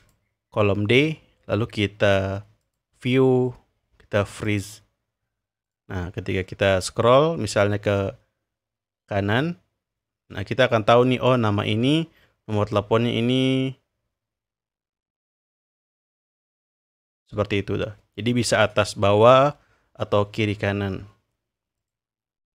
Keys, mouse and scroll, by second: 0.0 click, 2.6 click, 4.4 click, 5.8-6.4 drag, 6.4-7.8 scroll down 2, 8.0-12.3 drag, 12.7-18.7 drag, 20.4-21.7 scroll up 2, 21.9 click.